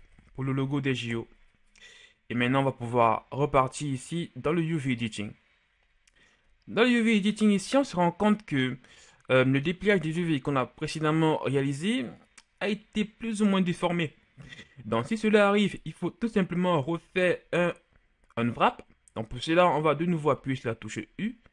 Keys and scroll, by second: 0.0-0.2 typing, 1.0 Return, 20.5 u.